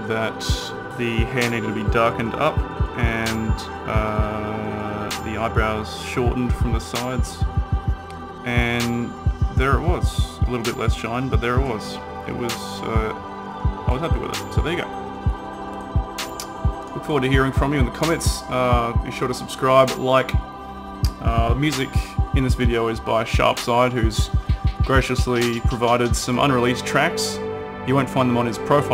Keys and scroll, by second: 8.4 typing.